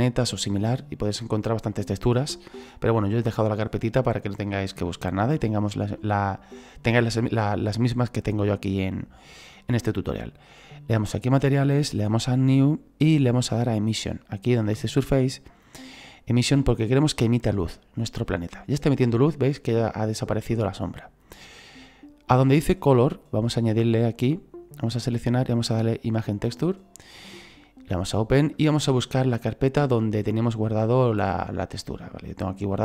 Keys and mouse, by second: 11.3 click, 13.8 click, 15.6 click, 17.6 click, 24.1 click, 26.2 click, 27.9 click, 29.9 click, 31.1 click, 32.2 click.